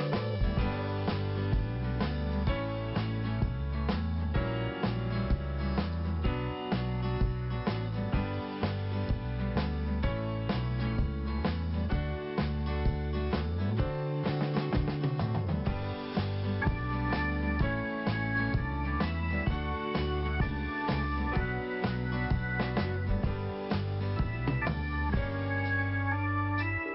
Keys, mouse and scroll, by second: 0.4 click, 1.2 t, 2.0 scroll up 1, 4.1 click, 4.1 click, 5.0 click, 5.1 click, 6.2 click, 6.2 click, 7.1 click, 10.1 click, 11.2 p, 12.5 click, 13.5 scroll down 2, 14.2-14.5 scroll up 2, 16.5 click, 17.7 click, 17.8 click, 19.3 click, 23.4 click.